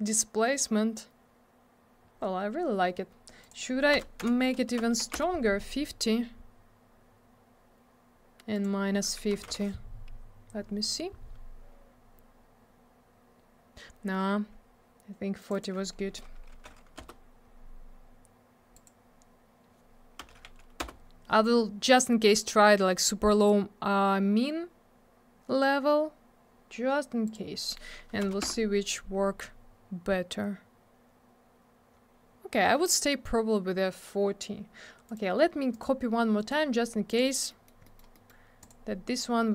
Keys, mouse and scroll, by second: 3.4 click, 3.9 BackSpace, 4.2 6, 4.8 BackSpace, 5.0 5, 5.1 Return, 8.5 click, 8.6 click, 9.3 BackSpace, 9.4 5, 9.5 Return, 12.3-13.6 scroll up 1, 13.8 scroll down 1, 15.4 click, 15.5 click, 15.5 click, 15.6 double click, 16.5 4, 17.0 Return, 18.7 click, 18.9 click, 20.2 BackSpace, 20.3 1, 20.8 Return, 22.7 scroll up 1, 23.3-24.0 scroll down 1, 27.2 click, 28.2 BackSpace, 28.3 4, 28.4 Return, 29.8 scroll up 1, 32.0-32.9 scroll down 1, 35.1 right click, 35.2 right click, 35.7 click, 35.8 click, 36.4 right click, 36.5 right click, 37.1 click, 37.2 click, 37.5 middle click, 37.7 middle click, 37.8 middle click, 38.0 double middle click, 38.1 middle click, 38.3 middle click, 38.6 click, 38.7 double click.